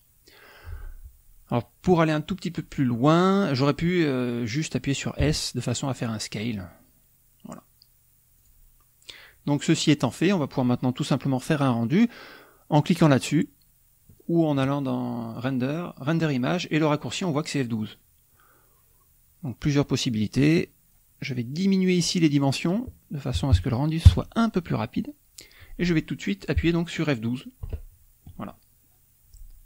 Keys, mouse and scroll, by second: 5.1 s, 8.3 click, 15.3 click, 20.0-21.0 drag, 22.3 click, 23.3 KP_2, 23.4 KP_5, 24.0 KP_Enter, 27.5 F12.